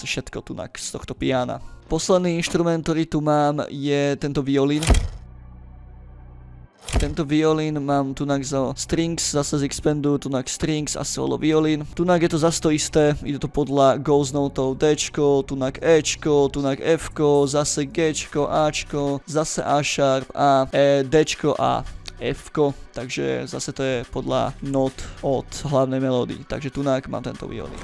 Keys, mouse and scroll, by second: 1.4 click, 1.9-2.3 scroll up 2, 2.4 scroll down 2, 2.5-3.5 ctrl+middle drag, 4.6 click, 6.9 click, 12.0 scroll up 2, 13.1 click, 13.5 click, 14.2-14.6 drag, 14.7-15.1 scroll up 2, 15.1 click, 15.8 click, 16.3-16.6 drag, 16.7 click, 17.5 drag, 18.2-18.6 drag, 18.7 click, 18.8 drag, 19.2 click, 20.0-20.3 drag, 20.4 click, 20.9 drag, 21.3-21.9 drag, 22.1 click, 23.9 middle click, 24.7 click, 25.2 click, 25.9 scroll down 2, 26.4-26.7 scroll up 2.